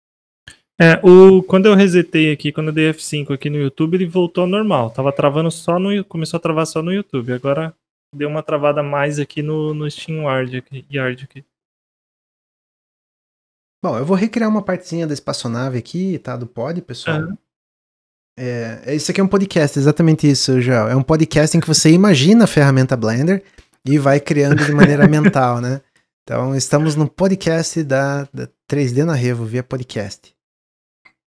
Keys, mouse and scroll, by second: 15.1-18.2 middle drag, 18.2-18.6 scroll up 1, 18.6-23.7 middle drag, 27.3-31.3 middle drag.